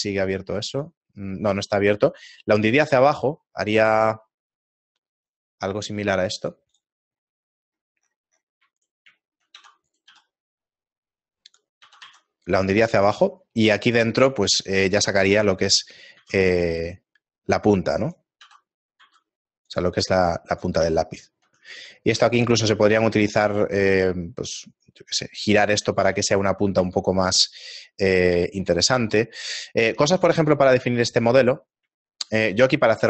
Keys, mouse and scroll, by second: 2.9 right click, 3.1 Tab, 3.7 middle click, 5.6 click, 7.0 click, 7.7 middle click, 7.7-8.2 scroll up 10, 8.8 alt+right click, 8.8-9.2 scroll up 6, 9.2 shift+middle click, 9.6 e, 10.1 s, 11.8 e, 14.4 shift+middle click, 15.0 shift+d, 18.4 e, 20.0 s, 21.0 shift+middle click, 22.0 shift+middle click, 23.9 r, 27.0 shift+middle click, 29.0 shift+middle click, 29.7-30.2 scroll up 4, 30.4 Tab, 30.4-30.8 scroll up 1, 31.3 Tab, 31.6 middle click, 32.0 shift+middle click.